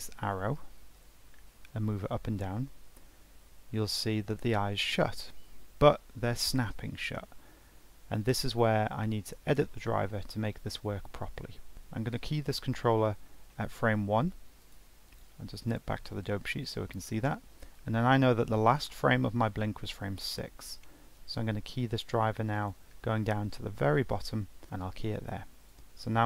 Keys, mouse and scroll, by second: 0.6 ctrl+Tab, 1.9 g, 11.7 i, 13.4-14.6 middle drag, 14.6 click, 15.0-20.8 drag, 21.1 g, 25.6-26.2 drag.